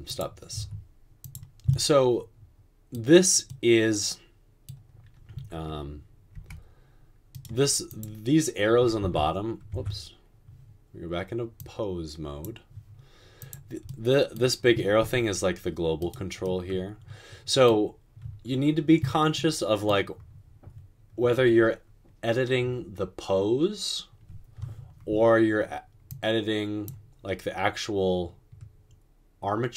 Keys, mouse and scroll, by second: 0.6 space, 6.6 g, 9.0 Tab, 9.0 typing, 9.7 Tab, 15.2 g.